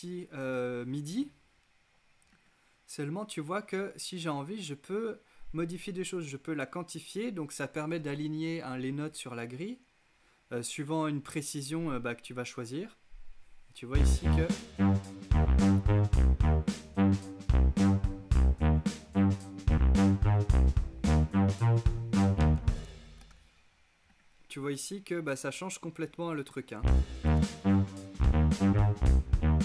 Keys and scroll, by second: 13.8 space, 22.1 super+z, 22.8 super+space, 26.8 space.